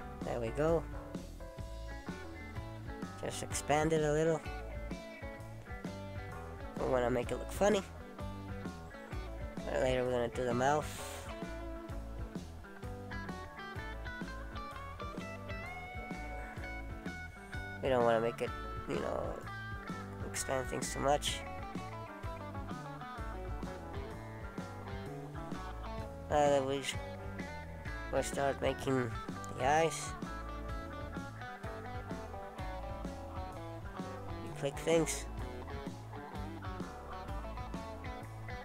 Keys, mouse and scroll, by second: 3.2 middle click, 5.7 alt+s, 8.3 middle click, 15.3 alt+s, 19.7 ctrl+z, 20.0 ctrl+z, 20.9 middle click, 24.0 click, 25.0-25.6 scroll down 1, 25.6 scroll up 1, 25.8 middle click, 28.7 click, 29.3 shift+click, 29.7 shift+click, 31.1 shift+click, 31.9 shift+click, 34.0 shift+click, 34.9 right click, 37.7 middle click.